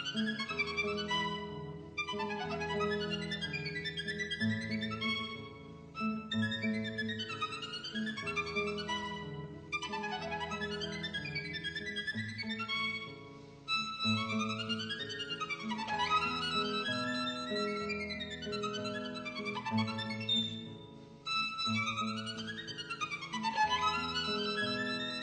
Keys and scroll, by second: 1.7 super+z, 4.5 super+z, 4.7 super+z, 5.5 super+z, 5.8 super+z, 6.2 super+z, 6.8 super+z, 7.6 super+z, 9.6 super+z, 14.6 super+z, 15.7 super+z, 18.4 Escape, 18.5 b, 19.0 super+z, 19.8 super+z, 20.2 super+z, 21.2 super+z, 22.0 super+z, 22.4 super+z, 23.5 super+z, 25.1 super+z.